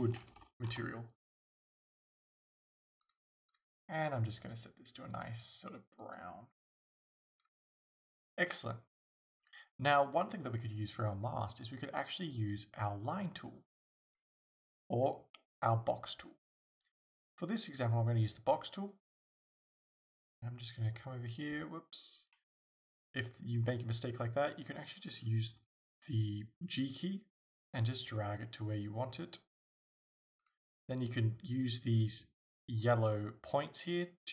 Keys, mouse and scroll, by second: 0.3 o, 0.8 Return, 3.0 click, 3.5 click, 13.1 click, 15.7 click, 18.8 click.